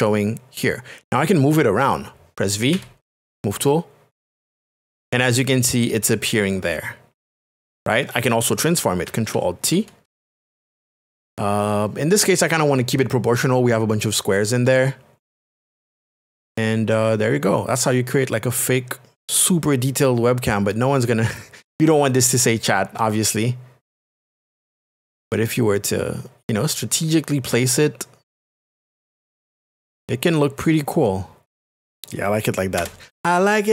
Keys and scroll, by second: 3.0 v, 11.7 alt+t, 32.8 Return.